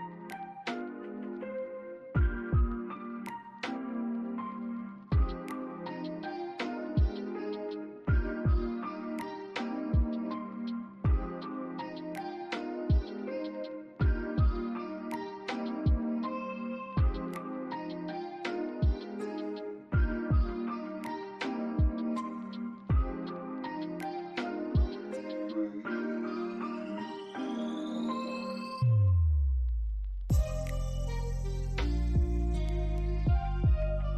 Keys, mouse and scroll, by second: 0.6 scroll up 1, 1.3 alt+click, 2.9 scroll up 1, 3.4 alt+middle click, 3.8 alt+click, 5.5 alt+scroll up 1, 6.2 alt+middle click, 7.6 alt+click, 8.5 right click, 10.5 alt+click, 10.8 alt+right click, 15.4 double click, 15.9 alt+click, 20.1-20.7 scroll down 1, 20.8 alt+middle click, 21.3 alt+click, 22.1 alt+middle click, 22.7 alt+click, 23.1 alt+middle click, 23.9 right click, 26.4 alt+click, 26.8 alt+middle click, 27.1-27.5 scroll up 2, 27.5 alt+click, 30.7 alt+middle click, 33.1 alt+middle click.